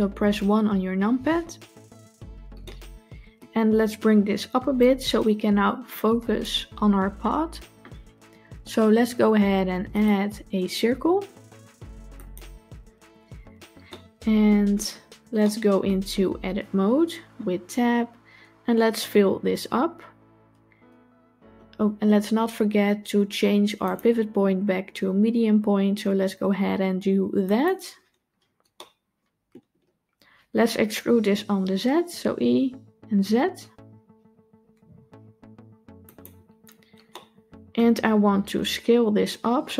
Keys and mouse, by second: 0.7 KP_1, 2.5-3.2 shift+middle drag, 4.6-6.3 drag, 9.8-12.2 drag, 13.7-14.3 middle drag, 15.3-15.7 shift+middle drag, 17.7 Tab, 20.4 f, 23.8-27.5 drag, 28.7 middle click, 37.0 middle click.